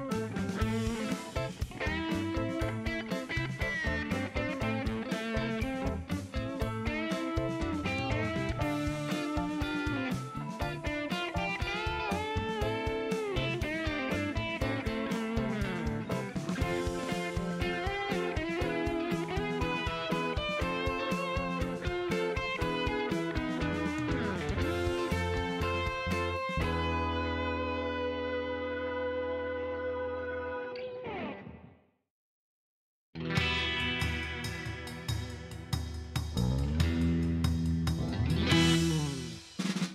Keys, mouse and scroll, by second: 0.4 shift+right click, 2.0 shift+middle click, 2.8 ctrl+shift+right click, 4.0 ctrl+shift+right click, 7.5 right click, 8.7 click, 10.1-11.9 drag, 12.6 click, 13.4 click, 15.3 click, 18.0-19.2 drag, 19.6 click, 20.2-21.2 drag, 21.6-22.7 drag, 23.7 click, 24.9 click, 25.9 scroll up 1, 26.6 scroll up 2, 26.7 middle click, 27.2 scroll down 2, 28.2 click, 29.5 click, 31.0 shift+right click, 33.8 click, 35.2 click, 36.7 click, 37.7 shift+middle click.